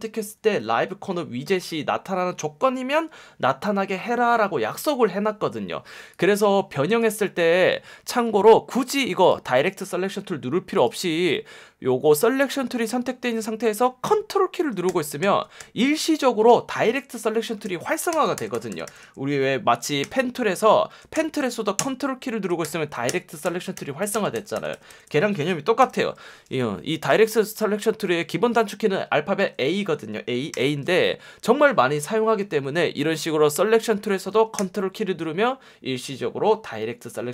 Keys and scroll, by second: 8.2 F1, 13.3 F1, 20.0 p, 25.8 v, 27.1 F1, 29.3 F1, 30.5 a.